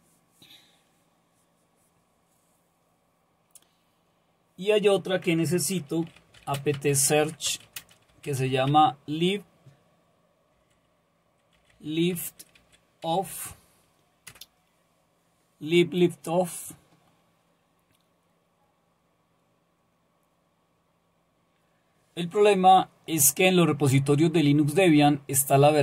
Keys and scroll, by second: 6.0 typing, 7.2-8.9 typing, 10.3-13.7 typing, 14.3 Return.